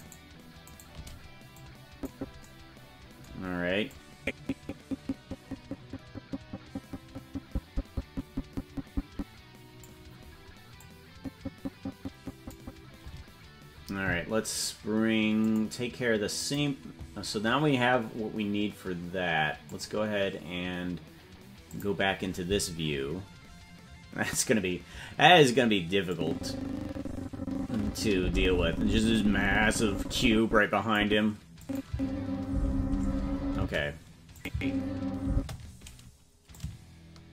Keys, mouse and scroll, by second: 0.4 shift+right click, 2.1 click, 4.3-10.3 drag, 11.3-13.0 drag, 15.6 click, 16.8 click, 19.8 click, 21.7 click, 26.1-31.0 drag, 31.6 click, 31.8 space, 33.5 space, 34.3 click, 34.4 space, 35.3 space, 36.5-37.3 shift+drag.